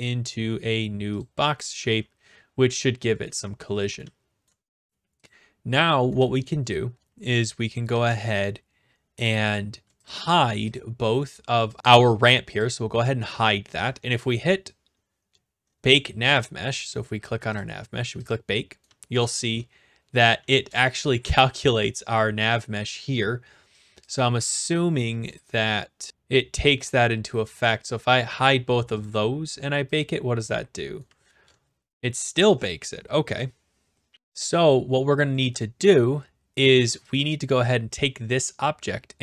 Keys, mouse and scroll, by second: 1.2 click, 2.0-4.0 typing, 3.2 right click, 4.4 right click, 5.2 click, 6.2-7.9 typing, 8.3 right click, 9.5 click, 10.1 shift+click, 10.8 click, 12.6 click, 13.0-13.9 typing, 13.9 middle click, 15.6-16.3 scroll down 5, 16.3 click, 17.6 click, 18.3 click, 18.9-20.8 typing, 21.5 right click, 22.3 right click, 24.1 click, 25.1 a, 25.3 right click, 26.1 click, 28.2-29.0 scroll down 1, 29.0-29.3 scroll down 1, 29.3 click, 30.0 click, 31.1-31.5 typing, 32.1 right click, 37.2 click.